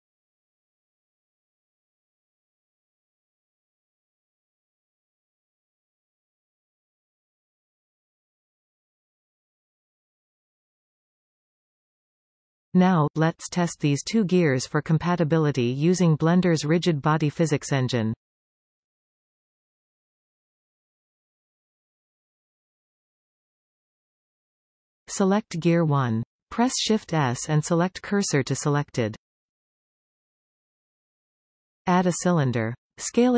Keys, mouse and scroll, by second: 0.0 alt+shift+click, 0.4 alt+shift+click, 2.0 alt+f, 3.2 alt+a, 3.9 alt+shift+click, 4.9 e, 8.1 alt+shift+click, 9.7 alt+f, 10.8-11.4 scroll down 2, 11.4 a, 13.1 shift+n, 14.4-14.8 scroll down 1, 14.8-15.9 middle drag, 15.9 Tab, 16.3-19.7 middle drag, 19.7 click, 26.1 shift+s, 31.6 shift+a.